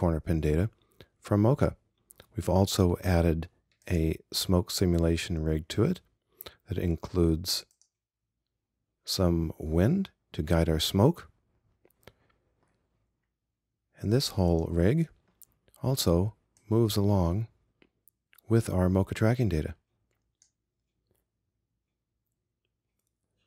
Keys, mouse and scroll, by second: 4.8-9.6 right drag, 14.7-16.8 right drag, 16.8-18.9 drag.